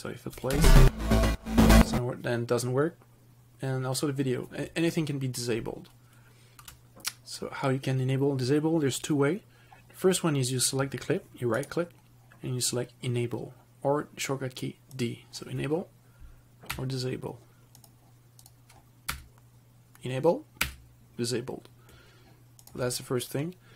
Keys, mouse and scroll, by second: 0.6 space, 6.8 space, 11.8 right click, 15.2 click, 16.9 d, 18.0 click, 19.3 d, 20.8 d, 22.9 click.